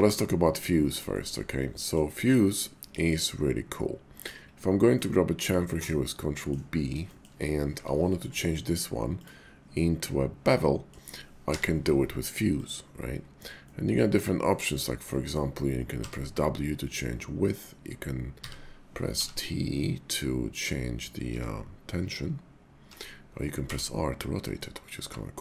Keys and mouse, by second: 1.1 shift+middle click, 1.8 middle click, 2.9 ctrl+b, 4.2 click, 4.9-6.5 middle drag, 7.0 shift+middle click, 7.7 Tab, 8.1 middle click, 9.1 click, 9.7-10.9 middle drag, 11.4 y, 13.7-15.1 middle drag, 16.0 w, 18.4 w, 19.2 t, 21.3 t, 22.9 t, 23.6 r, 24.6 click.